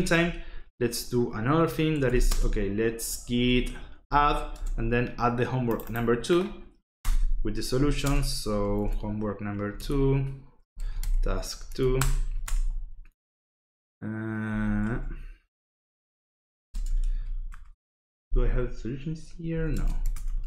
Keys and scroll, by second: 1.7-4.5 typing, 7.0 Return, 7.5-12.8 typing, 9.7 Tab, 11.7 Tab, 11.9 Return, 14.2-15.1 typing, 16.3-17.3 typing, 17.5 Return, 19.2-20.4 typing.